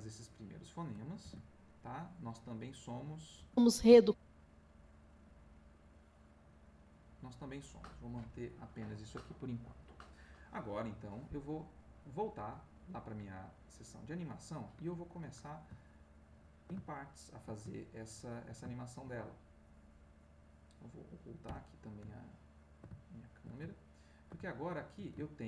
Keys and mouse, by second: 1.2 ctrl+s, 3.4 space, 4.7 click, 13.5 click, 16.0 ctrl+middle click, 16.9 ctrl+shift+click, 17.7-19.4 ctrl+shift+middle drag, 20.6 click, 21.4 h, 22.2 ctrl+click, 23.1-25.4 ctrl+shift+drag.